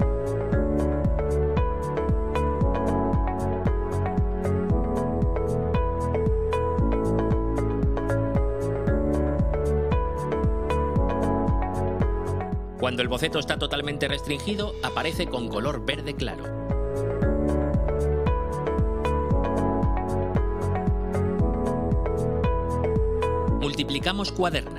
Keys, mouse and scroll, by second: 0.2 click, 1.1 right click, 2.2 scroll down 1, 5.7-6.9 drag, 8.5 click, 10.3 click, 11.6 click, 17.3-18.0 drag, 23.8 click, 24.6 click.